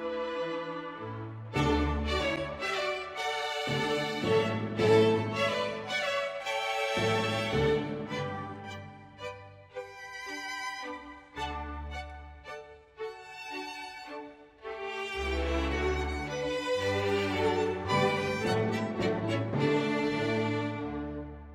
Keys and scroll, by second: 0.1 Page_Down, 0.5 Page_Down, 0.9 Page_Down, 2.0 ctrl+z, 2.8 ctrl+s, 3.1 Page_Down, 3.6 Page_Down, 3.9 Page_Down, 4.3 Page_Down, 4.7 Page_Down, 5.3 Page_Down, 5.5 Page_Up, 5.5 Page_Down, 5.7 Page_Down, 6.0 Page_Down, 6.4 Page_Down, 6.7 Page_Down, 7.2 Page_Down, 7.7 ctrl+s, 8.8 Page_Down, 8.9 Page_Up, 9.0 Page_Down, 9.5 Page_Down, 10.2 Page_Up, 10.5 ctrl+z, 10.5 Page_Down, 10.7 Page_Down, 11.1 Page_Up, 11.5 Page_Up, 11.6 Page_Down, 11.8 Page_Up, 11.9 Page_Down, 12.1 Page_Down, 12.5 Page_Down, 12.9 Page_Down, 14.2 Page_Down, 14.5 Page_Up, 14.6 Page_Down, 14.7 Page_Down, 15.0 Page_Down, 15.5 Page_Down, 15.8 Page_Down, 16.4 Page_Up, 16.5 Page_Down, 16.7 Page_Up, 17.0 ctrl+s, 18.1 space.